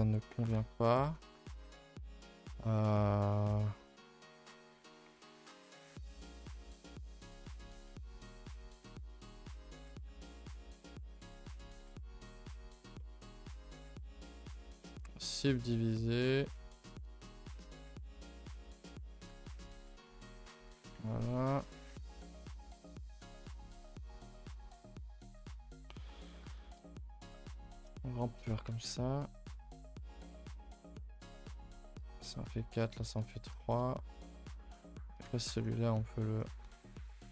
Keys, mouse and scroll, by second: 0.0-0.5 scroll up 1, 0.5 ctrl+r, 1.4 a, 1.6 a, 1.9 scroll up 2, 2.2 middle click, 2.5 scroll down 2, 2.8-4.7 middle drag, 4.7-5.0 scroll up 1, 5.0-6.0 middle drag, 6.0 2, 6.0 click, 6.3-7.0 right drag, 7.0 click, 7.3 2, 7.7-9.0 right drag, 9.0 1, 9.3 click, 9.7 middle click, 10.7 g, 11.8-13.4 middle drag, 13.4 g, 14.8 middle click, 15.9-17.1 middle drag, 17.1 scroll up 2, 17.3 middle click, 18.1 click, 18.5 middle click, 19.3 g, 20.7 click, 21.0 Tab, 21.1 middle drag, 21.4 scroll up 1, 21.6 a, 21.7 scroll down 1, 21.9 Tab, 22.1 middle drag, 22.3 a, 22.5 a, 22.6 middle click, 23.5 k, 28.2 middle click, 28.4 scroll up 2, 28.7 a, 28.9 a, 28.9 middle click, 29.3 click, 29.5 middle click, 30.5 g, 31.3 middle click, 32.0 a, 32.2 a, 32.2 middle click, 32.9 scroll down 1, 33.0 middle click, 33.3 a, 33.4 a, 33.6-35.5 shift+middle drag, 35.5 ctrl+r, 37.0 click, 37.2 g.